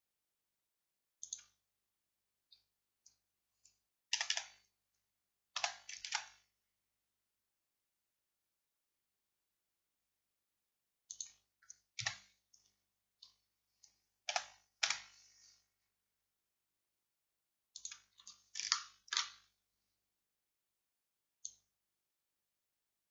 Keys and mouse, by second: 4.2 a, 4.4 a, 5.6 s, 12.1 KP_3, 13.0-15.3 middle drag, 14.4 s, 18.2-23.1 middle drag.